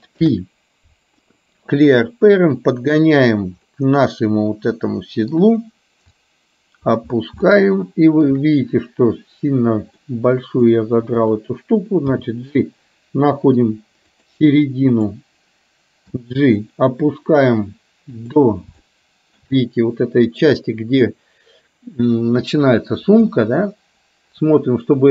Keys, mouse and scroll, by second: 0.2 alt+p, 2.1-3.1 drag, 3.7-5.5 middle drag, 6.2 click, 7.5 shift+middle click, 10.1 middle click, 11.2 click, 13.2 g, 15.0 click, 16.1 g, 19.0 shift+middle click, 23.3-25.1 middle drag.